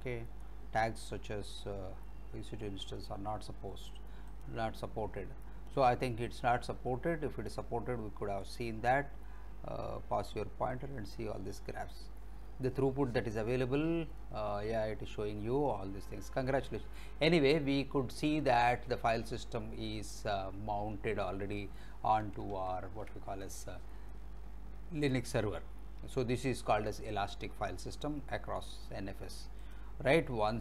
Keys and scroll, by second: 22.7 alt+Tab.